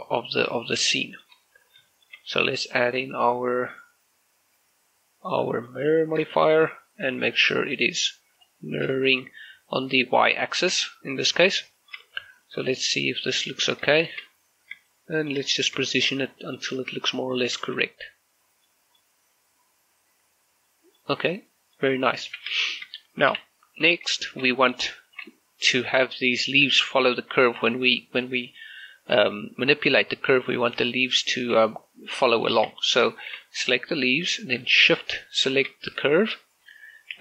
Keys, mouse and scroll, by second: 0.2-0.6 scroll down 2, 0.9 shift+middle click, 1.7 scroll down 1, 2.8 click, 5.9 click, 6.4 shift+middle click, 7.7 click, 8.7 scroll down 1, 9.1 shift+middle click, 9.3-10.4 scroll up 1, 10.5 shift+middle click, 11.0 middle click, 11.5 scroll up 1, 11.8 shift+middle click, 12.3 z, 12.5-14.2 middle drag, 14.9 middle click, 16.0 middle click, 16.7 scroll up 1, 17.2 middle click, 17.7 shift+z, 18.7 middle click, 20.0 scroll down 1, 20.7 middle click, 21.3 scroll down 1, 21.5 middle click, 22.3 z, 22.7 shift+middle click, 24.2 shift+scroll up 1, 24.7 right click, 25.3 Tab, 25.9 right click, 26.9 g, 30.5 right click, 31.6 g, 32.4 right click, 32.7 Tab, 33.3 shift+middle click, 33.6 right click.